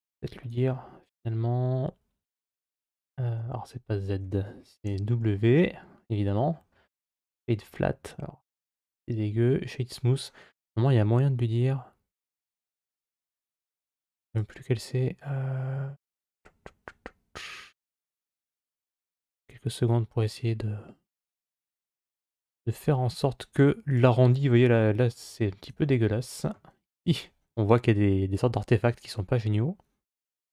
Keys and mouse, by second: 2.6 z, 2.9 z, 4.7 w, 8.4 w, 22.1 click.